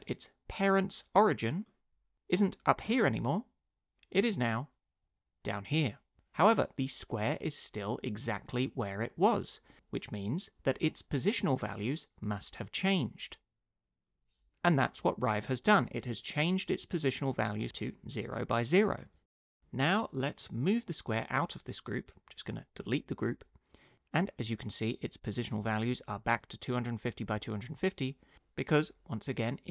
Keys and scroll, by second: 22.8 BackSpace.